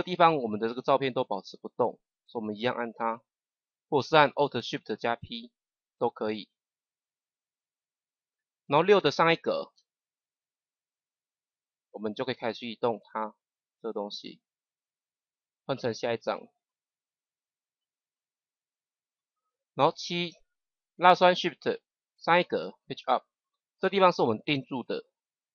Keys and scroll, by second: 5.1 alt+shift+p, 9.6 Page_Up, 18.1 Right, 22.4 Page_Up.